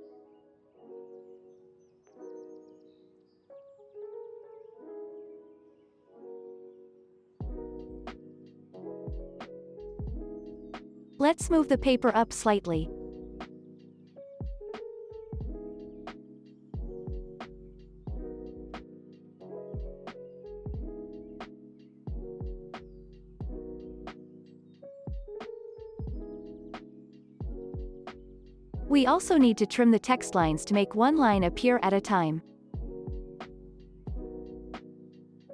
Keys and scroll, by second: 13.0 Up, 15.7 Down, 18.7 Down, 27.3 ctrl+s, 32.0 alt+[, 32.3 ctrl+s.